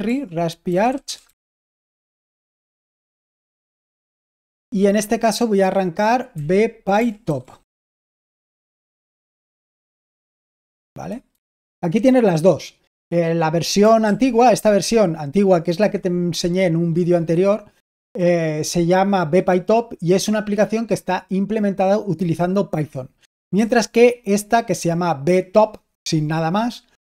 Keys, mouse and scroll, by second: 0.0-2.9 typing, 1.8 ctrl+a, 3.7 ctrl+l, 6.2-9.5 typing, 11.2 super+h, 14.0 super+l, 23.5 super+h.